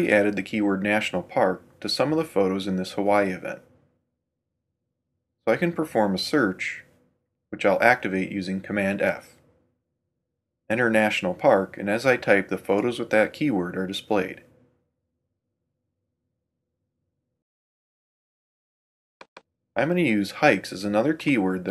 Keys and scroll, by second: 7.6 super+f.